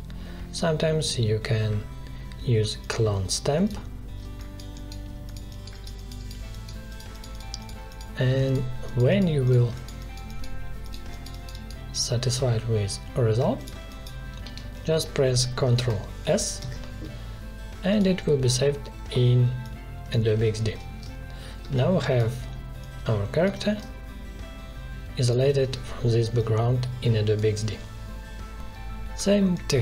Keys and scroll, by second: 14.4 v, 16.6 ctrl+s, 20.4 ctrl+z, 21.6 space, 29.1 space.